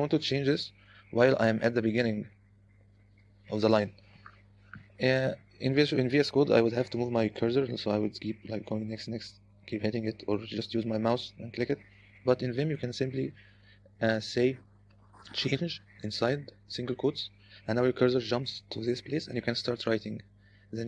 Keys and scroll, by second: 2.4 Escape, 3.1 0, 8.6 Right, 8.8 Right, 8.9 Right, 9.1 Right, 9.5 Right, 15.6 c, 16.3 i, 16.9 '.